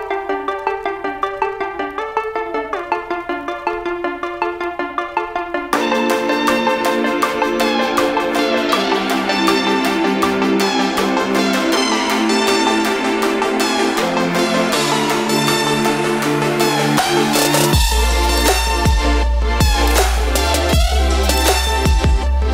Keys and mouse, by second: 2.2 click, 8.4-8.8 typing, 11.7 click, 14.2 click, 16.2-20.7 drag, 19.7 typing, 21.5 Down.